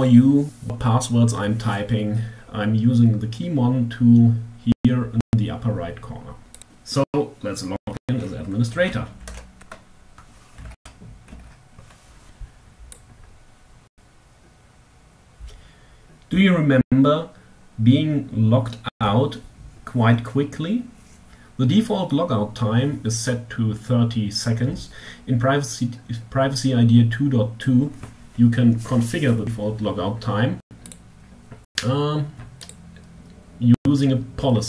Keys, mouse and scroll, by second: 5.8 click, 7.7-8.2 typing, 8.6 Tab, 9.6 t, 9.7 e, 10.2 s, 10.4 t, 12.1 click, 29.8 click, 31.4 click.